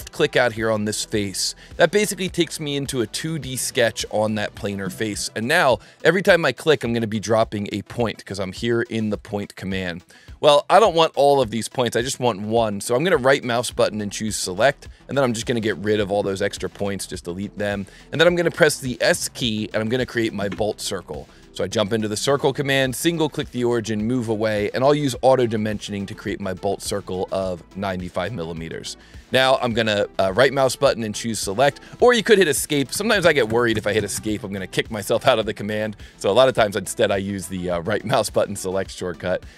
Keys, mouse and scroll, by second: 0.9 click, 5.9 click, 6.8 click, 7.5 click, 8.3 click, 9.1 click, 9.6 click, 12.9 right click, 13.9 right click, 14.8 right click, 15.4 click, 19.1 s, 21.3 click, 23.0 click, 30.3 right click, 32.6 click.